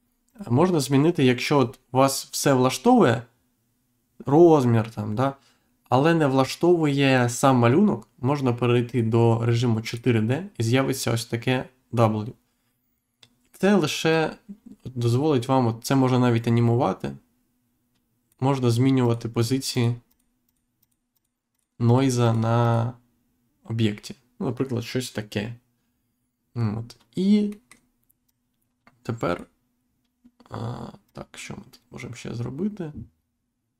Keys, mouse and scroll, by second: 0.2 click, 2.5-2.9 scroll down 1, 8.8 click, 9.8 click, 14.1 click, 19.0 click, 19.7 click, 20.0 click, 20.4 click, 20.8 click, 21.1 click, 21.5 click, 21.8 click, 22.2 click, 22.6 click, 27.4 middle click, 28.2 click, 31.0 click.